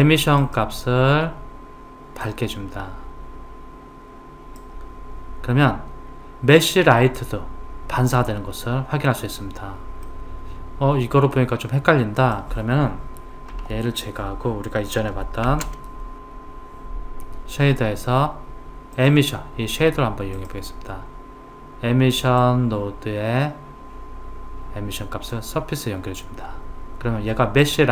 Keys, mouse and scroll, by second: 0.4 click, 10.1-12.2 middle drag, 12.2 click, 13.6 Delete, 15.5 shift+a, 22.4 click.